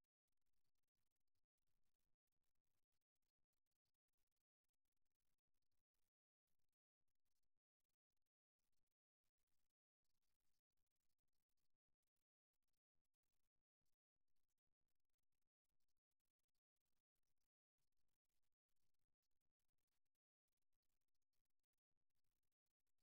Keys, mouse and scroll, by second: 2.2-3.2 right drag, 3.2 click, 4.1 right click, 5.3 f, 9.0 f, 11.2 x, 13.8-15.1 middle drag, 17.4-20.4 right drag, 20.6 f.